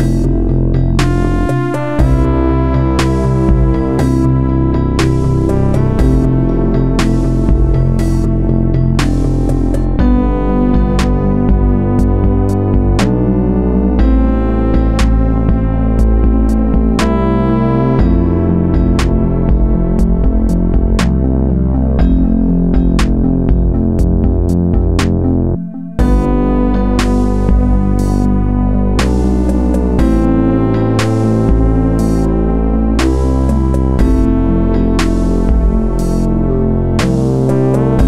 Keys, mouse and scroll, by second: 1.3 shift+d, 3.5 click, 11.4 a, 13.1 click, 14.9 b, 17.7 b, 20.8 w, 23.1 a, 26.1 click, 28.7 b, 32.3 b, 35.3 b.